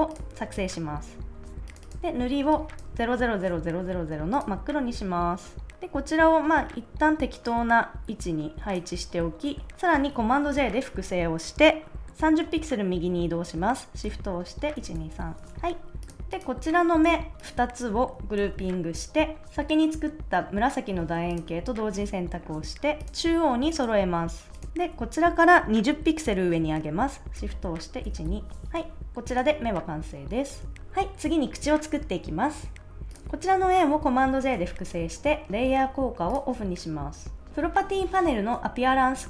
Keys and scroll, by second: 10.4 super+j, 14.7 shift+Right, 18.3 super+g, 28.0 shift+Up, 30.6 super+s, 30.7 BackSpace, 34.1 super+j.